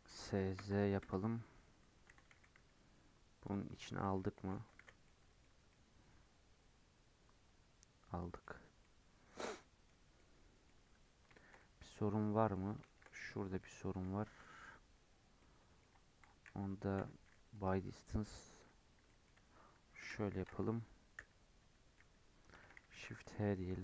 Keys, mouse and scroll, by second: 0.0 s, 2.0 g, 4.0 alt+z, 4.3 alt+z, 4.7 alt+z, 5.0 middle click, 5.4 Tab, 5.6-8.5 middle drag, 8.5 scroll up 2, 8.7 middle click, 9.3 scroll down 1, 9.5-10.7 middle drag, 10.7 Tab, 11.0-11.3 scroll up 2, 11.3-13.0 shift+middle drag, 13.0-13.5 scroll up 7, 13.5 middle click, 14.4-15.1 scroll up 8, 15.1-15.9 scroll down 4, 15.3 middle click, 16.9 m, 18.3-18.8 scroll down 3, 18.8 scroll up 2, 19.0 middle click, 19.9 ctrl+KP_Add, 21.1 /, 21.5 /, 22.8 shift+h, 23.1 middle click.